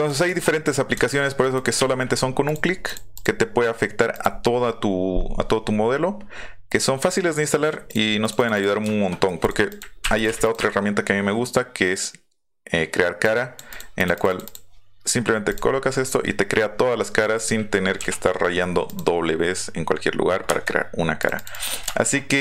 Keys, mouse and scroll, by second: 1.5 click, 2.4 click, 2.8 click, 3.1 click, 4.1 click, 7.9 drag, 8.2 click, 8.3 click, 8.5 click, 8.8-9.2 shift+middle drag, 9.4 click, 9.7 click, 10.2 drag, 10.4 click, 13.2 click, 13.7 click, 14.0 click, 14.1 click, 14.4 click, 15.5 click, 16.6 middle click, 18.8 click, 21.2 click, 21.3 click, 21.5 click, 21.8-22.4 middle drag.